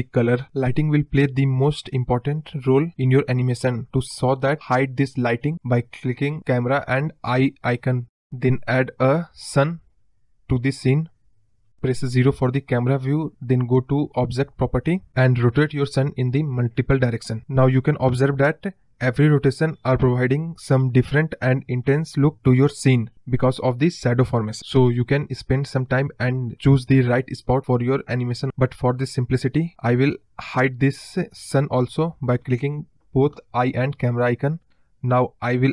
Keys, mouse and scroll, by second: 3.9 ctrl+z, 6.7 click, 7.3 click, 8.0 shift+a, 11.5 middle drag, 11.8-12.1 scroll down 3, 12.1-12.8 middle drag, 12.8-13.9 scroll up 1, 13.9 r, 15.6 KP_0, 16.3 r, 17.3 click, 18.4-20.8 drag, 21.5-25.5 drag, 26.4-29.8 drag, 32.9 click, 33.7 click, 35.0 shift+a.